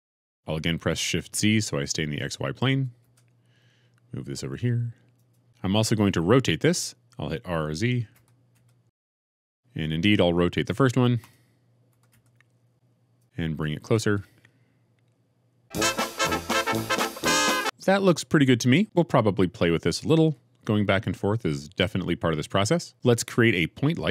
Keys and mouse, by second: 2.9 shift+z, 8.0 r, 8.6 z, 11.1 click, 11.8 r, 12.0 z, 13.1 click, 13.7 g, 13.9 shift+z.